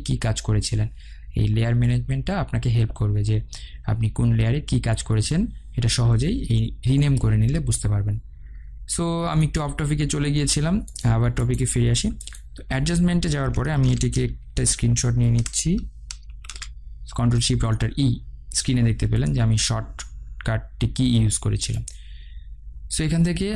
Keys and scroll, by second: 16.4 ctrl+alt+shift+e.